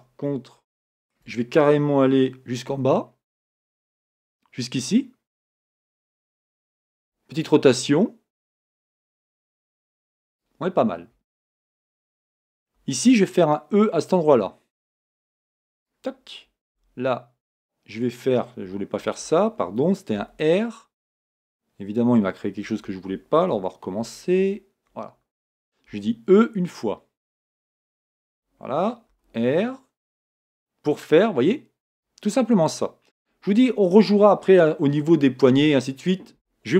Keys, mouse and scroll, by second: 0.6-36.7 shift+middle drag, 2.8 g.